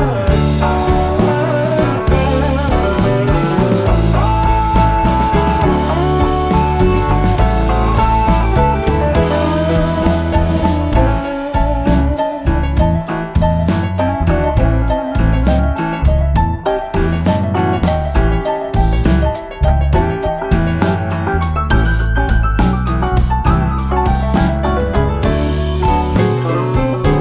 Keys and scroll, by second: 10.1-11.0 typing, 24.0-24.9 typing.